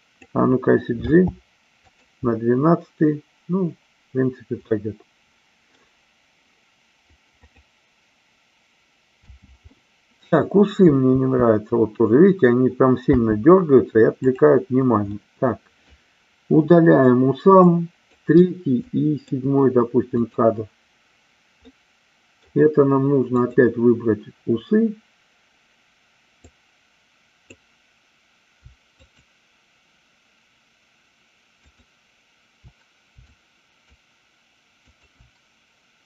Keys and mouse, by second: 1.0 g, 4.6-5.7 middle drag, 7.4 click, 9.2 space, 9.7-10.2 middle drag, 14.2 click, 14.2 space, 15.2 middle click, 17.6 click, 18.8 shift+click, 20.1 click, 21.7 middle click, 23.3-24.4 drag, 26.5-27.5 drag, 29.0-30.1 shift+drag, 31.6-32.6 shift+drag, 33.2-33.8 shift+drag, 34.8-35.8 shift+drag.